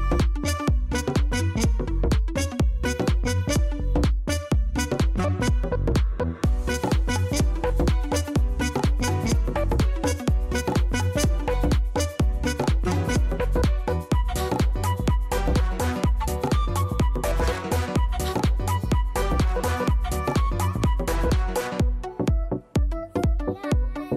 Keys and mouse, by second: 0.4 alt+middle click, 0.7 alt+right click, 0.8 alt+click, 1.7 alt+middle click, 1.9 alt+right click, 2.1 alt+middle click, 2.3 alt+click, 2.8 alt+middle click, 3.0 alt+click, 3.2 alt+middle click, 5.7 click, 10.6 click, 11.0 click, 12.7 click, 18.6 click, 18.9 click.